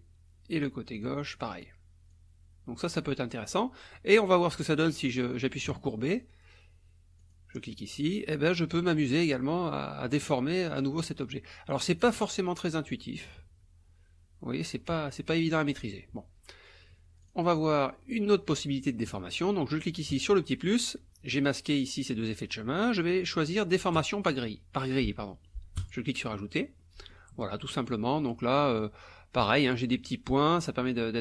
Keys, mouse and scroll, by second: 1.0 click, 2.1 click, 5.7 click, 7.2 click, 8.9-11.0 drag, 12.0-15.5 drag, 17.2 click, 17.7 click, 20.1 click, 24.0 click, 25.8 click, 26.8 click, 28.8 click, 30.9 click.